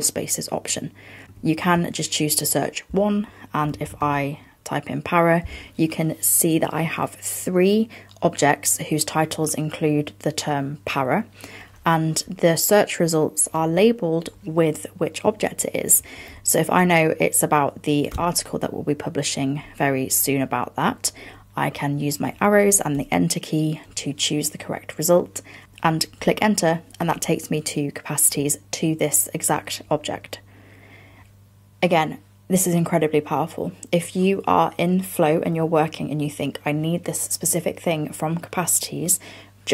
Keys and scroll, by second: 16.0 fn+Down.